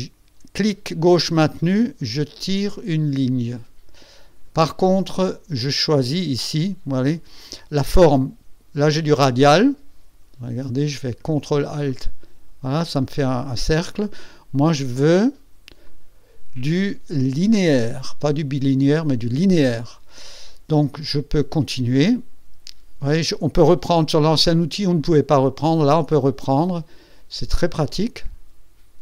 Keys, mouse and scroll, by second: 11.8 ctrl+alt+click, 12.9 ctrl+alt+click, 15.8 click, 17.9 click, 25.5-29.0 drag.